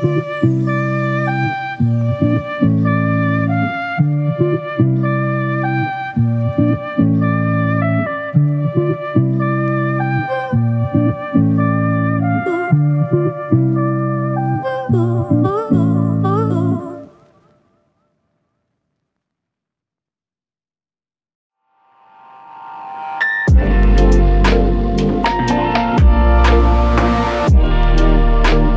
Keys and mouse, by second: 0.6 alt+click, 3.7 double click, 20.2 double click.